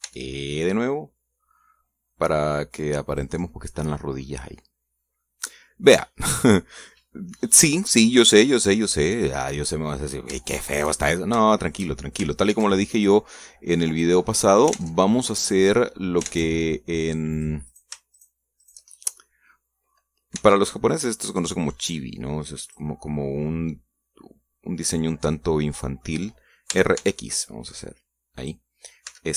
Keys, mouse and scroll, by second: 0.7 e, 3.8 click, 4.6-6.9 middle drag, 7.3 scroll down 1, 7.6-10.1 middle drag, 10.2 scroll up 2, 11.3 shift+middle click, 11.9 shift+scroll up 2, 12.2 shift+middle click, 13.2 ctrl+r, 13.7 ctrl+click, 14.7 click, 15.0 middle click, 15.5 ctrl+Tab, 16.2 click, 17.0 ctrl+Tab, 18.1 click, 18.5 shift+right click, 18.9 shift+right click, 19.4 shift+right click, 19.7-20.8 shift+middle drag, 21.1 e, 23.4 click, 26.2 middle click, 27.5 r, 27.7 x, 29.2 click.